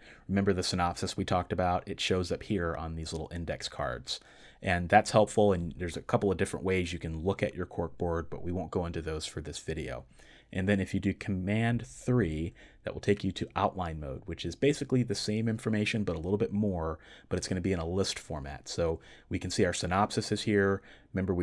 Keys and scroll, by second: 11.9 super+3.